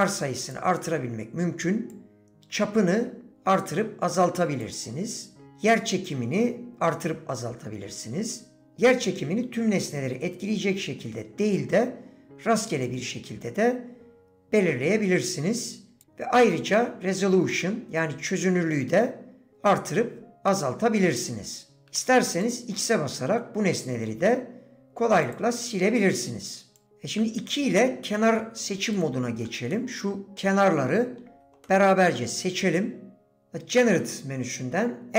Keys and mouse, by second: 0.5 click, 2.0-4.6 drag, 5.4-8.6 shift+drag, 12.9-16.0 shift+drag, 16.7-21.8 drag, 22.4 x, 23.2 middle click, 25.3 click, 26.8 click, 26.8 2, 29.6 typing, 29.7 click, 31.6 click.